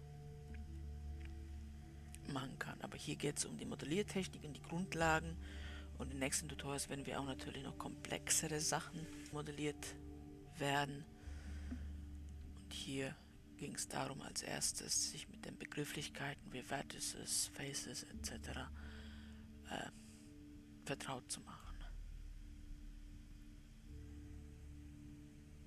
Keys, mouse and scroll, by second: 15.5-21.0 middle drag.